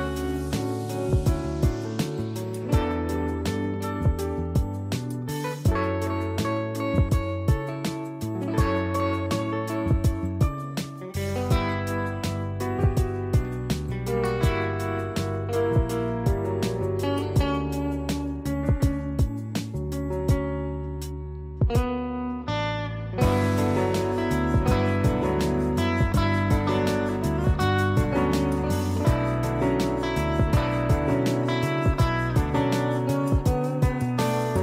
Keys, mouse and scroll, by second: 1.6 click, 4.5 click, 10.8 click, 18.2 click, 27.3 click, 30.7 click, 33.8 click.